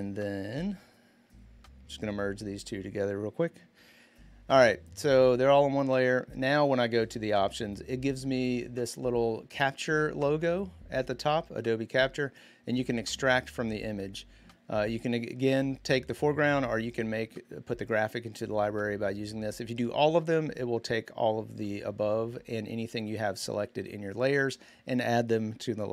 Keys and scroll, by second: 3.5 ctrl+e.